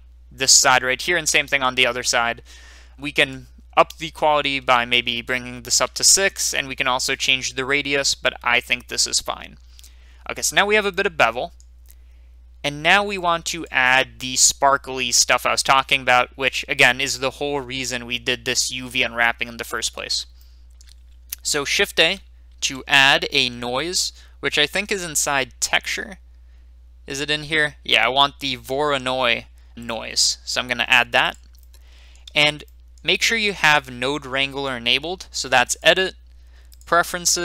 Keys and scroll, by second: 5.7 typing, 6.0 Return, 22.5 a.